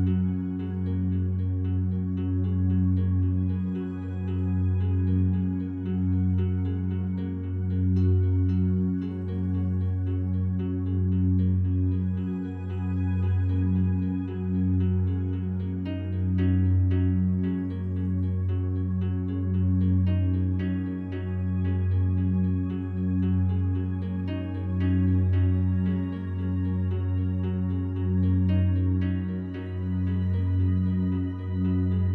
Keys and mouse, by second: 0.3 click, 1.8-2.1 typing, 3.4 shift+click, 4.3-5.7 drag, 6.1-13.7 drag, 15.5 BackSpace, 15.9 Left, 18.0 i, 19.1 click, 20.4-23.1 drag, 23.5 Right, 24.8 i, 25.3-26.3 drag, 26.3 Right, 26.5 Right, 26.7 Right, 26.9 Right, 27.9 i, 29.3 click, 30.4 click, 31.5 s.